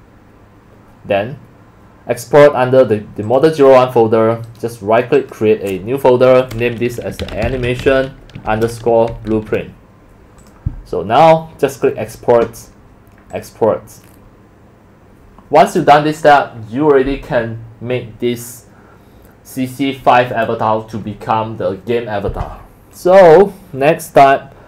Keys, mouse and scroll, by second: 3.3 click, 3.6 click, 4.4 right click, 5.2 click, 7.0-9.8 typing, 10.4 click, 11.7 click, 13.3 click, 23.0 click.